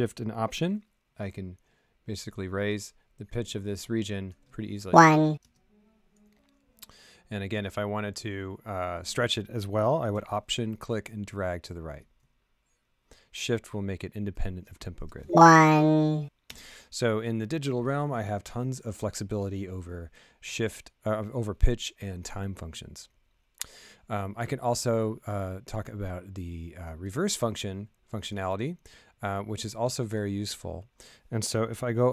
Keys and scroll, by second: 4.8 space, 5.4 space, 15.0 space, 16.4 space.